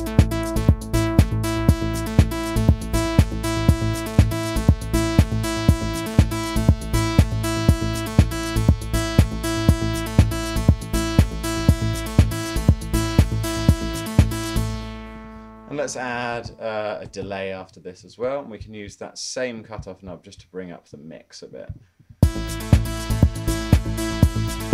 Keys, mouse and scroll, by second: 14.5 Escape, 14.6 space, 16.0-18.2 typing, 21.7-22.1 typing.